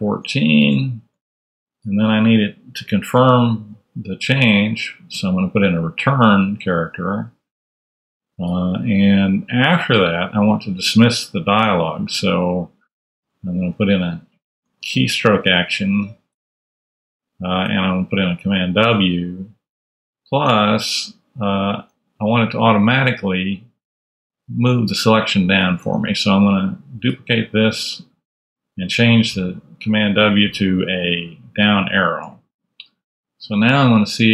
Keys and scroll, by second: 0.3-1.1 typing, 3.1 \, 5.1 r, 14.5-15.3 typing, 16.2 Return, 17.2 super+Return, 20.4 super+Tab, 24.6 Down, 25.4 Up, 25.7 super+Tab, 27.2 super+d.